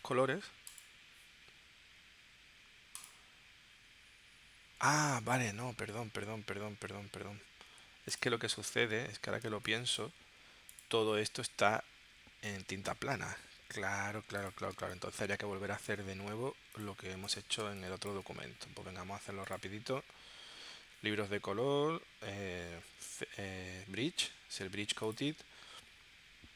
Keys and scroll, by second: 7.1 super+z, 9.5 space, 14.8 space, 17.7 space.